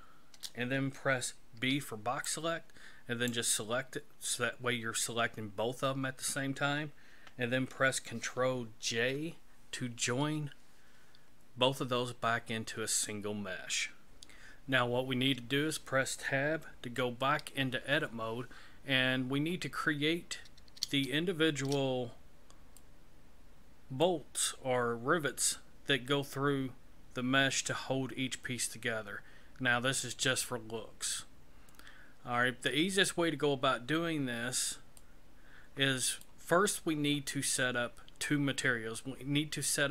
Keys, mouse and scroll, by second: 1.6 b, 8.9 ctrl+j, 16.8 Tab, 20.4-20.8 scroll up 3, 21.1 shift+middle click, 22.0 scroll up 3, 22.8 middle click, 33.3 scroll down 3, 34.2-34.7 scroll down 1, 35.0 middle click.